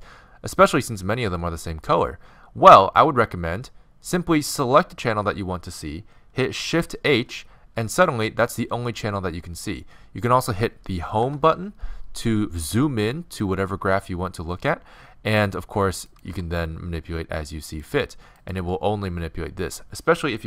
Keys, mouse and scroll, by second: 0.9 a, 4.5-6.3 drag, 7.1 shift+h, 8.6 a, 11.3 Home, 14.7-17.8 drag, 16.3 g, 17.8 click, 17.9-18.4 middle drag, 18.4-20.3 drag, 18.6 g, 20.3-20.4 middle drag.